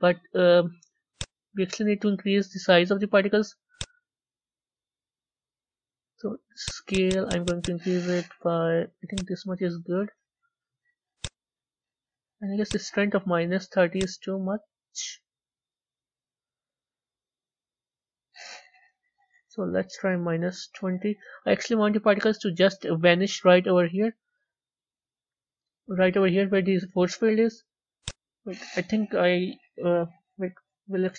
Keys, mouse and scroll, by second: 1.0 click, 3.6 click, 4.7-5.4 scroll down 8, 6.5 click, 9.0 click, 11.0 click, 12.5 click, 13.8-16.8 drag, 17.9 Left, 22.1-25.2 middle drag, 27.9-30.4 drag, 30.4 Left.